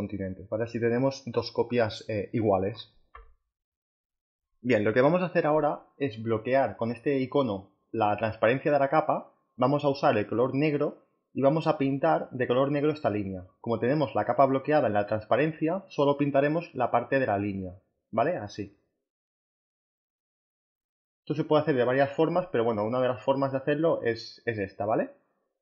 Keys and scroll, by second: 13.9 b.